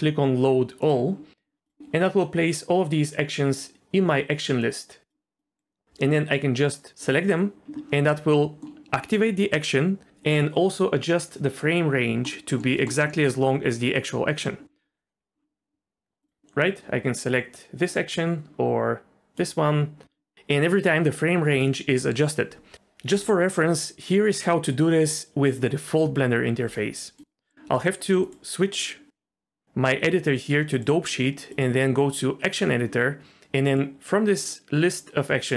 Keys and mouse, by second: 4.6 click, 5.4 click, 8.5 middle click, 12.4 middle click, 12.8 ctrl+middle click, 16.2-27.5 drag, 30.8 click, 31.6-32.5 drag, 33.8-35.5 drag.